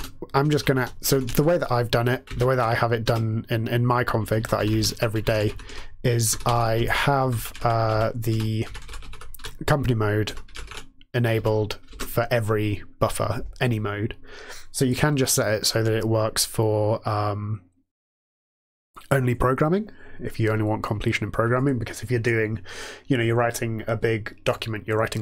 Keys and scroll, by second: 0.0-11.8 typing.